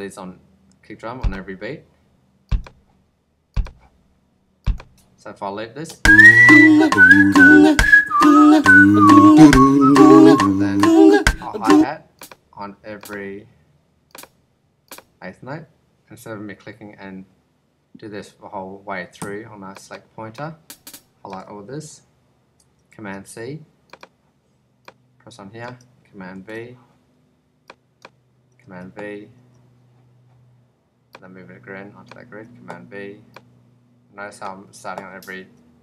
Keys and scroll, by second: 5.8 space, 11.6 space, 19.1 Escape, 22.8 super+c, 26.3 super+v, 28.6 super+v, 32.2 super+v, 35.3 super+v.